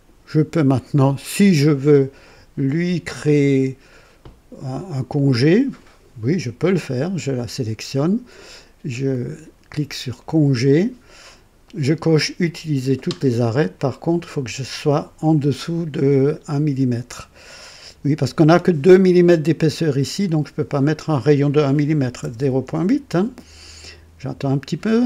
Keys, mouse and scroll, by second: 0.9-2.5 drag, 7.1 click, 10.1 click, 13.7-14.7 drag, 22.1 KP_0, 22.3 KP_Decimal, 22.6 KP_8.